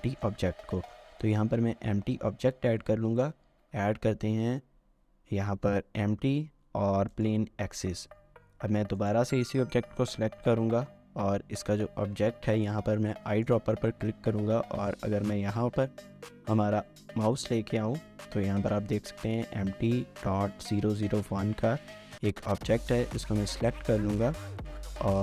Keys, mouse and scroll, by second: 0.1 shift+middle click, 0.4 scroll down 1, 0.7 middle click, 3.5 a, 25.1 middle click.